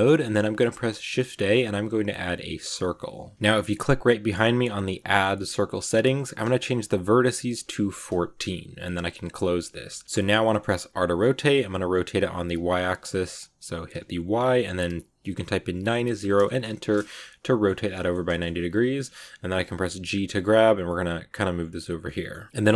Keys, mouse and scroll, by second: 0.4 shift+a, 4.7-7.9 drag, 9.2 click, 9.6 middle click, 10.2 scroll down 2, 10.4 middle click, 10.8 r, 16.9-18.0 middle drag, 18.0 scroll down 1, 18.2 middle click, 18.9-19.4 scroll up 1, 19.4-19.9 scroll up 1, 19.9 g, 21.9-22.7 middle drag.